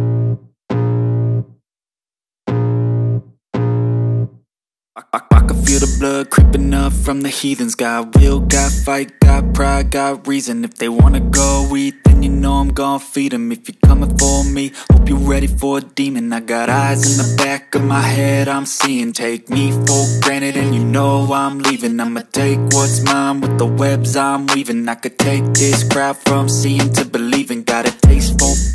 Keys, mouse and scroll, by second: 1.0 i, 2.1 click, 2.4 v, 3.3 click, 7.9 Tab, 8.9 shift+Tab, 9.5 shift+Tab, 11.4 Tab, 12.2 click, 13.0 Tab, 13.8 click, 14.5 Tab, 15.1 shift+Tab, 17.6 click, 22.1-25.6 drag.